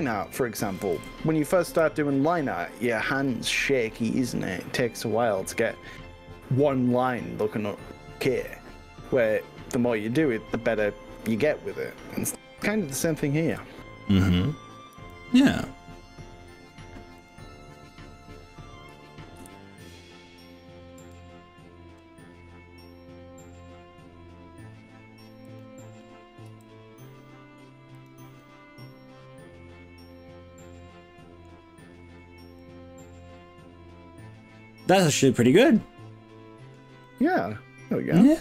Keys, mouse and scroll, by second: 0.9 ctrl+KP_Add, 1.1 ctrl+KP_Add, 1.7 ctrl+KP_Add, 3.1 g, 4.8 scroll up 1, 5.3-6.5 scroll down 7, 8.9 scroll up 2, 9.3-9.9 scroll down 3, 10.1 scroll up 1, 11.3 click, 11.9-12.9 middle drag, 13.5 KP_7, 15.0 r, 17.3 click, 19.5 ctrl+KP_Subtract, 21.0 s, 22.5-23.9 scroll up 7, 25.5 click, 26.5 g, 28.1 click, 28.4-31.5 middle drag, 31.9-32.5 scroll down 4, 32.6 middle click, 33.6 middle click, 34.1-36.9 middle drag, 37.0-38.4 middle drag.